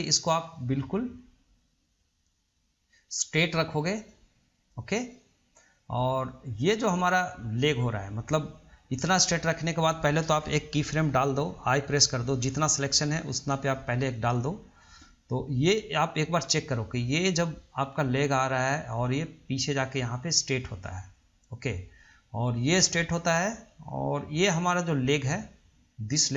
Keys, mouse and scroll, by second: 16.0-19.0 drag.